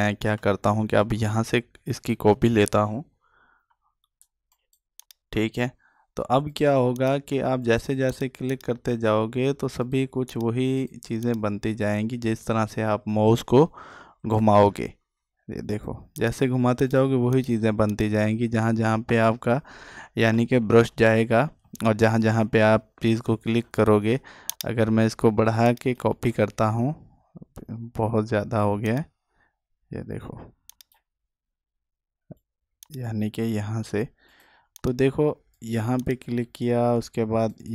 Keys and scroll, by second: 20.6 ctrl+alt+z.